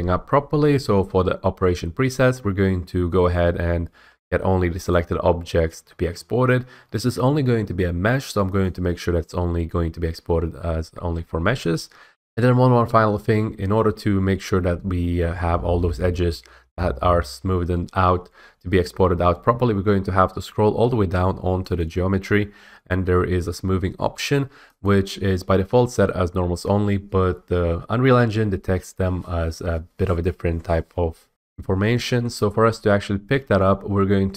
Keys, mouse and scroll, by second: 4.9 click, 8.6 click, 18.8-19.5 scroll, 19.5-21.7 scroll, 21.7 click, 22.3-23.8 scroll, 24.8 click, 31.3 F8.